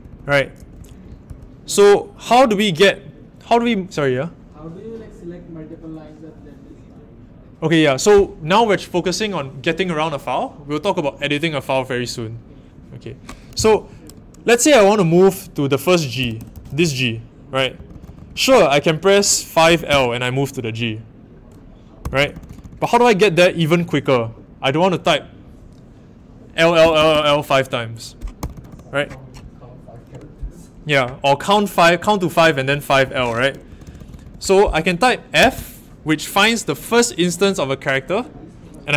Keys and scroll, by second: 0.0-1.2 typing, 16.2-20.3 typing, 22.0-22.5 typing, 26.8 typing, 28.4 typing, 32.7-34.2 typing.